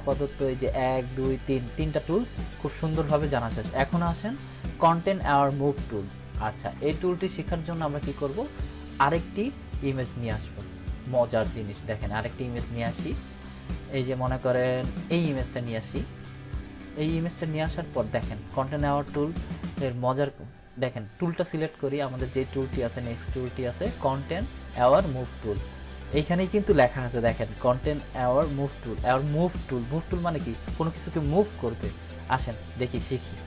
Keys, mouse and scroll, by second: 7.3 click, 12.7 click, 16.9 click, 19.1 ctrl+=, 32.2 click.